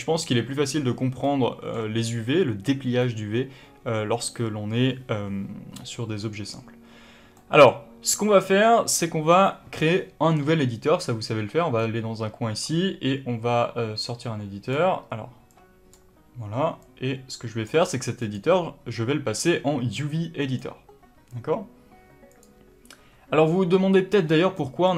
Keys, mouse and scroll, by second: 1.2-11.8 middle drag, 11.8-24.4 drag, 24.4-24.9 middle drag.